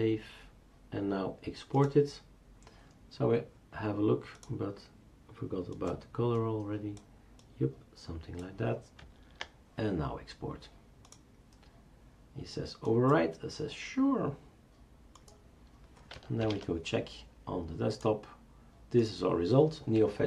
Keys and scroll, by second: 16.4 shift+super+Return.